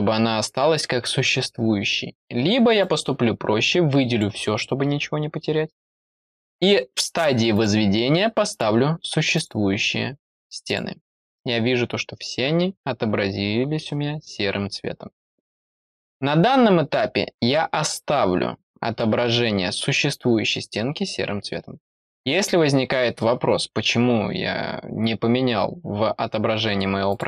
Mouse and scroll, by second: 2.7-4.1 drag, 7.5 click, 8.4 click, 9.3 click, 10.6 click, 27.0 click.